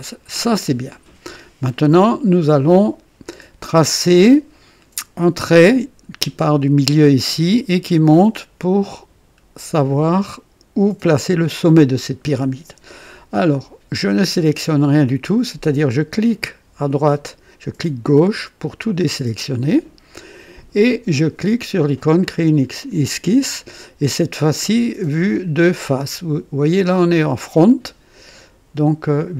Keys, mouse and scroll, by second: 3.6-5.0 drag, 18.0 click, 22.2 click.